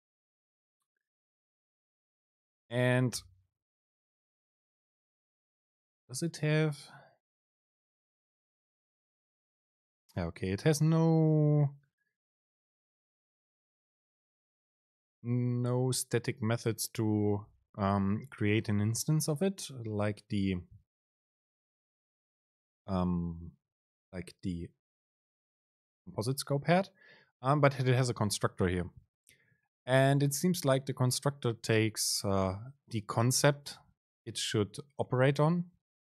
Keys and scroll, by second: 3.6 Return, 5.3 BackSpace.